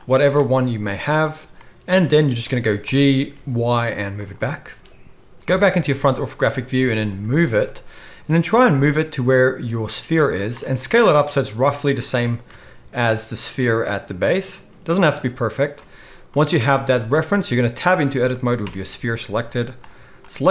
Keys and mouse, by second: 0.0 click, 1.4-4.3 drag, 2.9 g, 4.3-16.2 middle drag, 5.4 KP_1, 7.1 g, 10.7 s, 12.0 g, 16.2 click, 16.4-20.1 middle drag, 18.6 Tab, 19.3 z, 20.1-20.5 drag.